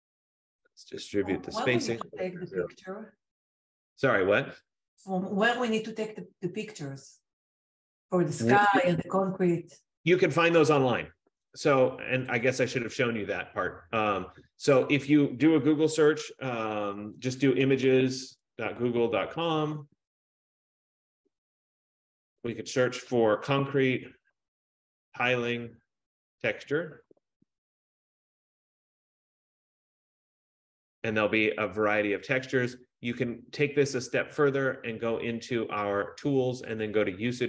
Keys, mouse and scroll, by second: 2.0 click, 3.5 click, 13.3 click, 14.9 click, 17.3-20.3 typing, 22.7 click, 23.5-28.2 typing, 27.7 click, 34.8 click, 37.1 click.